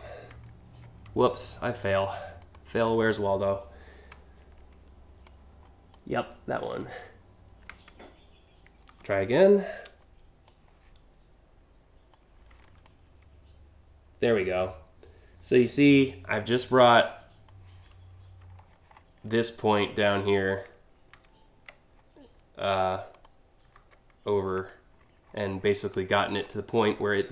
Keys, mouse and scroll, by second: 2.0 click, 4.8-5.5 shift+drag, 8.6 ctrl+t, 10.0-11.7 drag, 12.4-17.1 drag, 18.1-18.6 alt+scroll up 3, 20.7 ctrl+z, 22.7 click, 23.3 ctrl+z, 24.6 scroll up 3, 24.8 scroll down 2, 25.2 scroll up 2, 25.4-26.5 scroll down 7, 26.5 alt+scroll up 2.